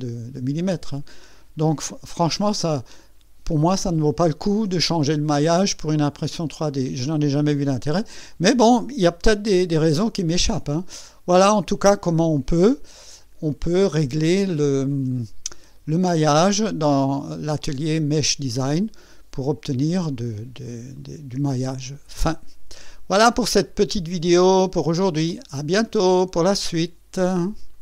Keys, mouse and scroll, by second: 14.2 click, 15.1 click, 26.0 right click, 27.7 click.